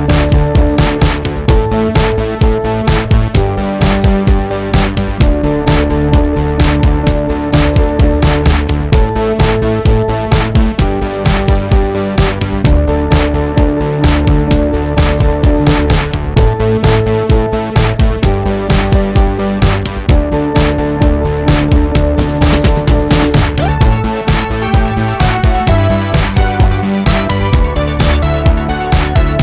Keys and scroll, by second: 5.7 w, 10.1 w, 10.7 space, 12.0 -, 16.7 w, 21.9 g, 27.5 Left, 28.9 w, 29.1 ctrl+KP_1.